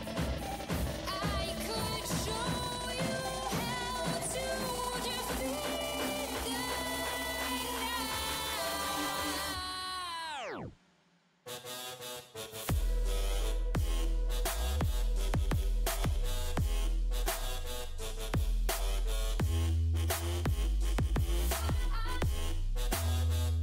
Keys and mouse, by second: 1.1-2.1 right drag, 1.1 e, 2.6 click, 3.8 g, 5.0 z, 6.3 g, 7.3 g, 8.6 g, 10.3 g, 12.5 g, 15.5 g, 17.2 g, 19.0 g, 20.4 g, 21.7 g.